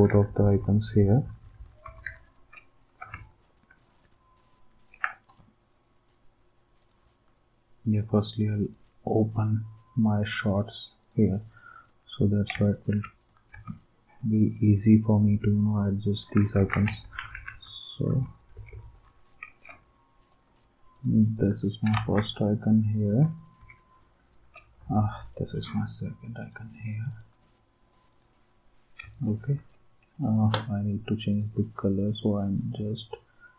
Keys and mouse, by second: 0.1 Down, 0.2 Down, 0.4 Down, 0.6 Down, 0.7 Down, 0.9 Down, 1.0 Down, 1.2 Down, 1.4 Down, 1.5 Down, 1.8 Right, 12.6 shift+click, 13.5 s, 14.3 d, 16.5 ctrl+s, 17.0 Down, 17.2 Down, 17.3 Down, 17.5 Down, 18.0 Left, 18.3 Left, 18.5 Left, 18.7 Left, 18.9 Left, 22.1 Right.